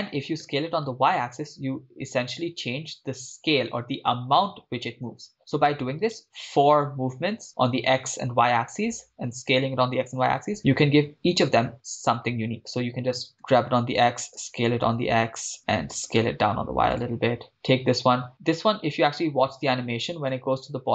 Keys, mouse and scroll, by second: 0.4 s, 0.9 y, 6.1 right click, 13.2-14.5 typing, 14.0 click, 15.6 click, 15.8 s, 16.2 y, 16.9-17.4 drag, 17.5 right click, 20.5-20.9 drag.